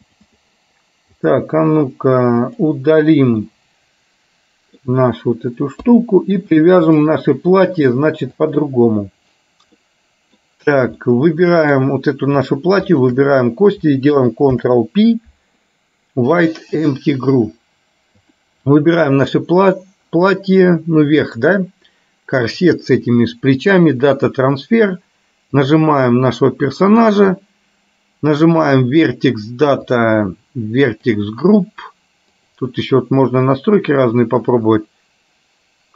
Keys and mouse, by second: 1.3 click, 2.6 click, 3.6-4.9 middle drag, 5.9 KP_3, 7.1 click, 8.6 click, 9.9 middle click, 11.1 middle click, 12.9 shift+click, 14.6 ctrl+p, 18.3 click, 19.8-24.6 drag, 25.7 click, 32.3-35.9 drag.